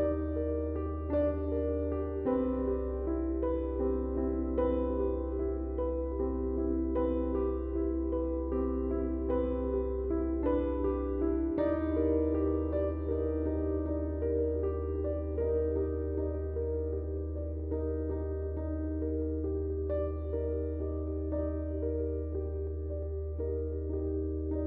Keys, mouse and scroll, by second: 2.3-9.3 drag, 9.7 space, 9.8-12.1 drag, 11.6 space, 12.1-14.3 drag, 14.6 space, 14.8 click, 15.0 space, 15.4-24.6 drag.